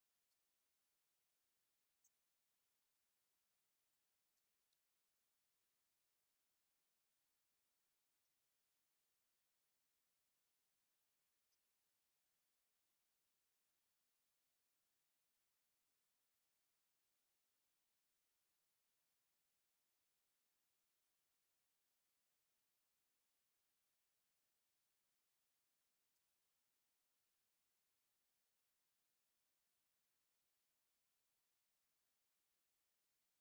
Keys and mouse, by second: 9.2-15.5 drag, 23.5-27.7 drag.